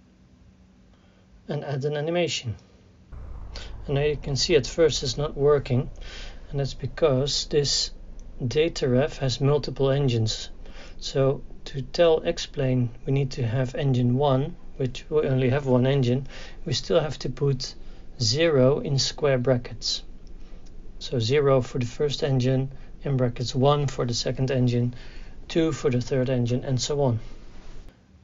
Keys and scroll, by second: 19.8 ctrl+v, 21.6 [, 21.9 KP_0, 22.1 ].